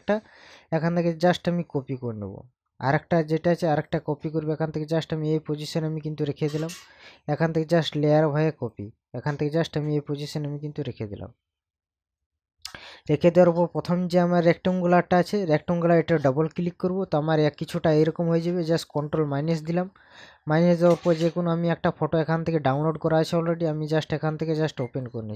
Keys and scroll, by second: 19.0 ctrl+KP_Subtract.